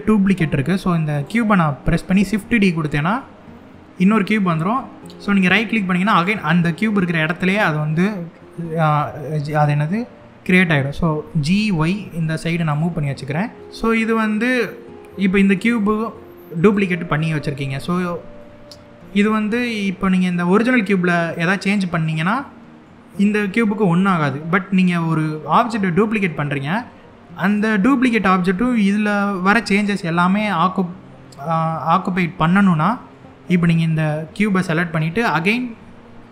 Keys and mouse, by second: 0.8 click, 1.8 shift+d, 5.8 right click, 10.9 g, 11.3 y, 12.2 click, 15.3 click, 16.3 click, 18.1 middle click, 22.1-22.5 middle drag, 27.1 click, 32.5-32.8 middle drag.